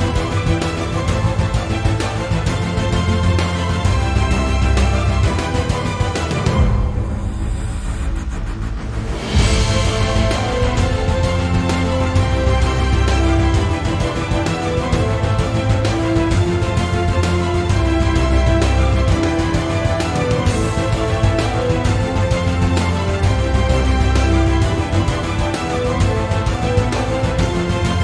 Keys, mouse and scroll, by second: 0.6 drag, 0.7-3.8 typing, 1.4 click, 2.0 click, 2.8 click, 3.6 click, 4.3 click, 5.3 click, 5.4 g, 6.6 click, 6.6 g, 7.0 right click, 7.1 click, 7.3 g, 7.7 click, 8.6 click, 8.7 x, 9.1 click, 9.2 g, 10.5 click, 10.6 g, 11.3 click, 15.6 scroll up 1, 16.1 click, 16.2 g, 17.2 shift+click, 17.4-18.3 right drag, 18.3 click, 18.4 g, 19.5 right click, 23.1 g, 23.7 click, 23.8 g, 24.5 click, 24.7 g, 25.2 click, 25.3 g, 27.0 click, 27.2 g.